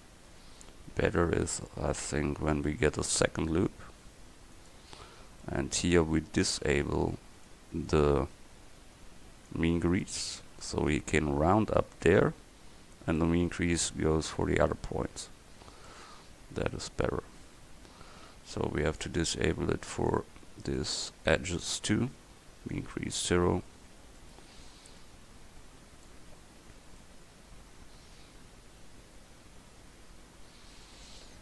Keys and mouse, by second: 2.6 ctrl+r, 12.0 Tab, 15.2 Tab, 19.1-21.6 drag, 23.9 Tab.